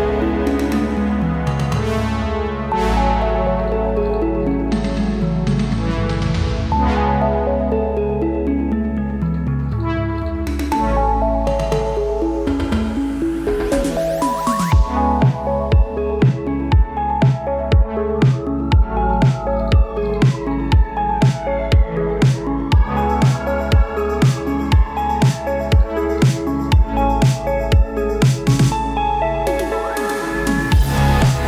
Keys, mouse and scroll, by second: 1.5-2.2 typing, 2.3 Return, 3.6 click, 5.1-6.1 typing, 7.4-13.1 drag, 8.2-8.9 typing, 14.5-18.5 typing, 26.8 ctrl+space, 27.0-28.6 typing, 28.4 Return, 30.1 typing, 30.6-31.4 drag.